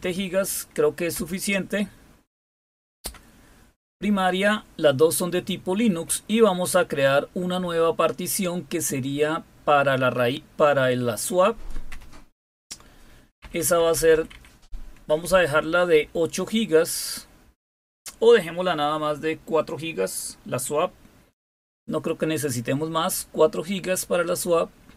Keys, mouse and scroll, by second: 0.0 Right, 1.1 Return, 3.0 Return, 7.6 Down, 11.9 Return, 13.4 Left, 13.6 Left, 13.7 Left, 13.9 Left, 14.1 Left, 14.3 Left, 15.2 Delete, 15.5 Delete, 16.0 Delete, 17.4 Delete, 21.4 4.